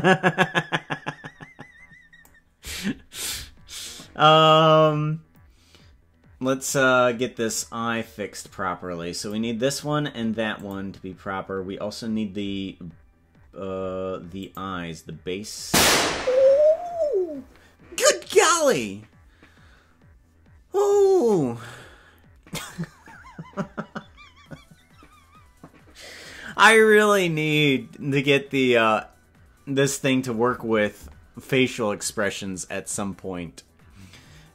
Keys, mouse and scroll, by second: 9.3 click, 10.6 click, 11.9 scroll up 1, 12.4 scroll down 2, 14.5 click, 14.5 scroll down 4, 15.8 scroll down 1.